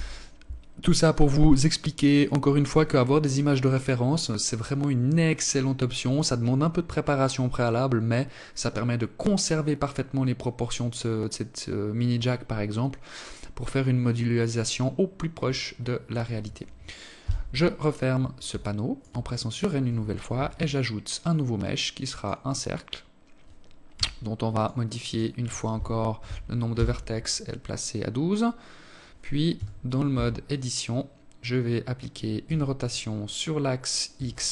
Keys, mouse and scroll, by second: 16.0 n, 17.3 alt+shift+click, 19.1 shift+a, 22.7 t, 23.3 click, 23.9 click, 28.3 t, 28.9 Tab, 31.2 r.